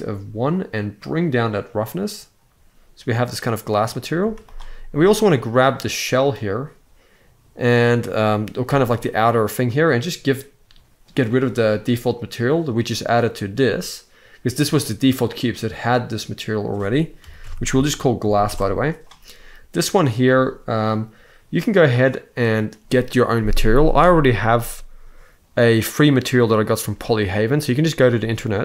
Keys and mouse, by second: 0.6-3.3 drag, 3.8 z, 8.3 g, 10.9 click, 16.1-18.2 drag, 18.0 s.